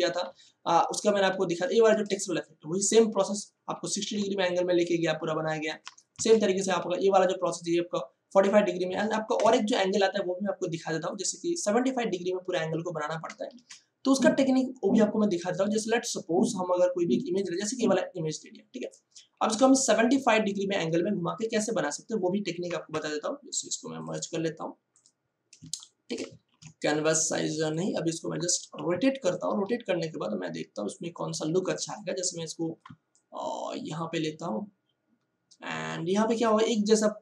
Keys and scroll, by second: 2.0 ctrl+space, 4.0 space, 6.1 ctrl+shift+Tab, 9.2 ctrl+shift+Tab, 13.5 ctrl+o, 25.6 ctrl+space, 26.4 ctrl+alt+c, 28.3 ctrl+t.